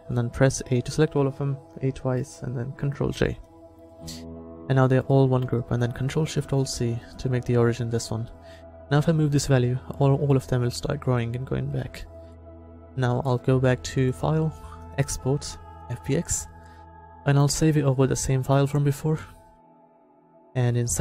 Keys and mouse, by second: 0.2 a, 0.6 a, 3.2 ctrl+j, 9.1-11.0 ctrl+alt+shift+drag, 12.4-15.9 middle drag, 18.7-21.0 drag.